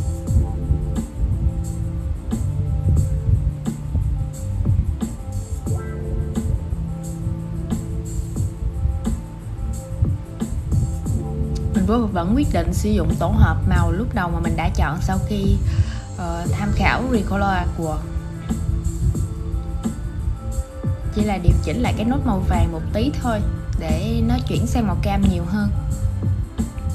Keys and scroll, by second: 7.7 super+z.